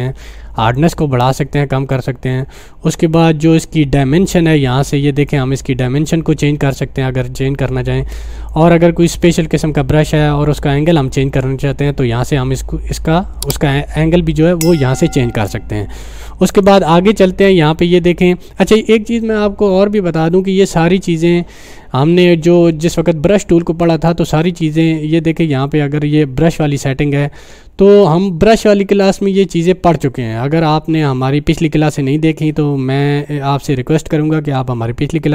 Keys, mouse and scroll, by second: 5.3-8.7 drag, 23.8 click.